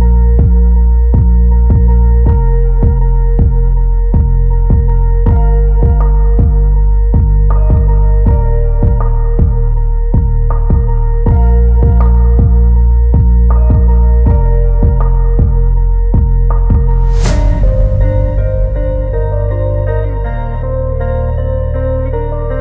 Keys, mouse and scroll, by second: 1.7 middle drag, 2.1 Tab, 2.6 middle click, 3.3 g, 5.0-6.6 middle drag, 7.1 middle click, 10.7 d, 11.8 s, 13.2-14.0 drag, 14.3 s, 16.9 click, 17.6-19.1 drag, 19.4-22.6 drag.